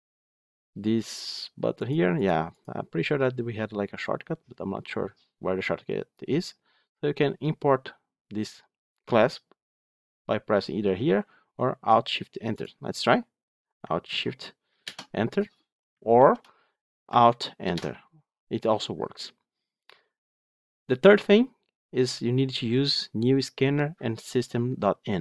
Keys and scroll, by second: 16.0 ctrl+z, 17.9 alt+Return.